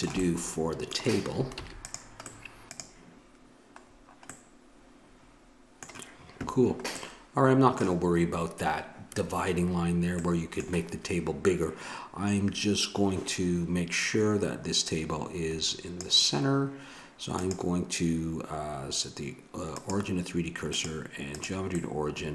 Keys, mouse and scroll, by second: 1.5 ctrl+s, 4.4 middle click, 7.8-9.0 middle drag, 10.2-14.3 middle drag, 14.8-19.3 drag, 20.7-21.7 drag, 21.7 middle click.